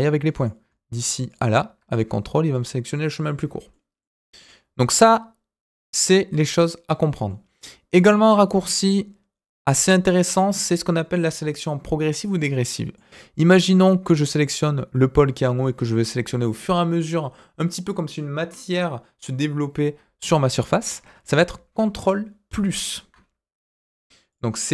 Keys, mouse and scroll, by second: 0.3 click, 1.2 ctrl+click, 3.7 middle click, 7.2 middle click, 8.1 click, 8.4 scroll down 2, 8.7-11.0 middle drag, 12.9 middle click, 20.9-22.0 scroll up 2, 22.5 ctrl+KP_Subtract, 24.3 click.